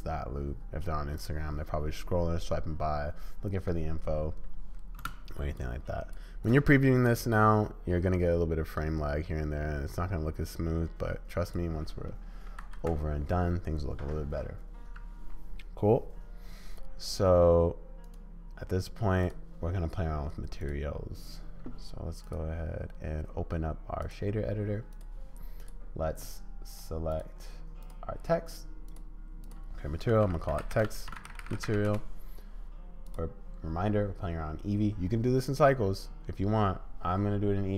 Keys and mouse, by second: 5.0 space, 5.8 click, 6.4-11.5 drag, 12.6 ctrl+s, 18.2-20.7 drag, 22.2-24.1 drag, 24.9 click, 25.6 click, 26.7-27.9 drag, 28.8 click, 29.4-32.4 drag, 33.1 click.